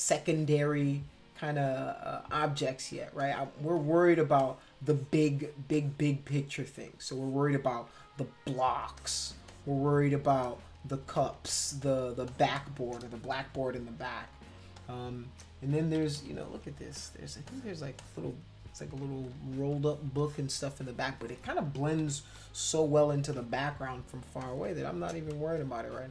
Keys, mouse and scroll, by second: 2.4 space, 2.5 click, 3.2 click, 3.8 click, 4.4 click, 4.9 click, 5.7 click, 6.3-7.7 drag, 8.8 space, 9.0 click, 9.5 click, 10.4 click, 11.3 space, 11.5 click, 11.8 click, 12.3 click, 12.5 click, 13.3 ctrl+-, 14.3 space, 14.7 click, 16.0 ctrl+=, 16.2 ctrl+=, 16.6 space, 16.9 click, 17.5 click, 18.0 click, 20.1 space, 20.2 click, 22.0 ctrl+-, 22.4 ctrl+-, 24.2 space, 24.4 click.